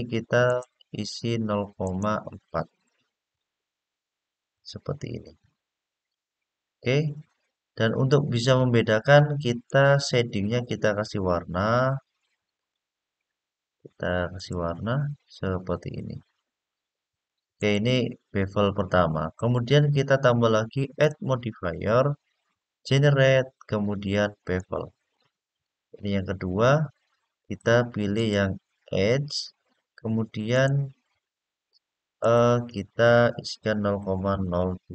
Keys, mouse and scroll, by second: 0.2-5.1 drag, 9.4 click, 10.0-10.5 scroll down 2, 11.6 click, 12.3 click, 14.3 click, 17.3 click, 20.7-24.5 drag, 27.2 click, 27.9 click, 30.3-34.9 drag.